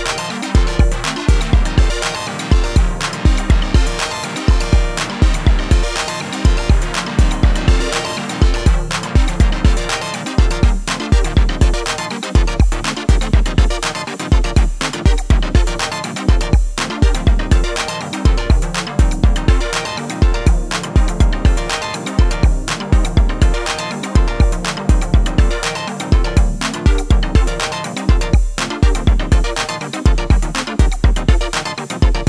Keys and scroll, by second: 0.1 ctrl+=, 1.2 ctrl+-.